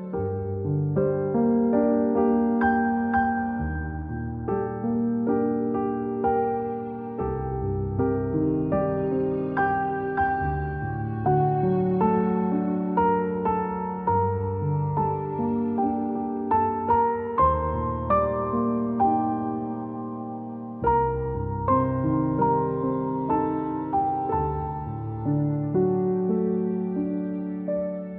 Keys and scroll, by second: 0.1 x, 8.2 Delete, 10.5 a, 13.9 typing, 15.4 typing, 18.4-19.4 typing, 21.1 z, 21.8-22.3 space, 22.8 a, 25.8 -, 27.5 a.